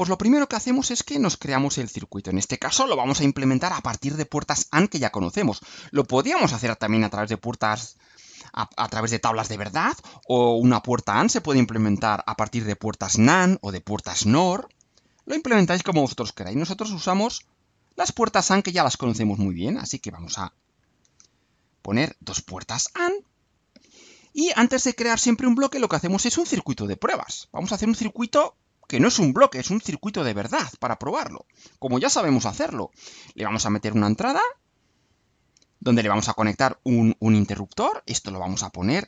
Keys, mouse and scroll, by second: 17.5 click, 19.0 click, 19.4-20.2 drag, 20.8 ctrl+c, 21.2 ctrl+v, 21.6-23.1 ctrl+drag, 23.8-24.6 drag, 33.4 click, 34.6 click, 35.7 click, 36.8 click, 38.1 click, 38.9 click.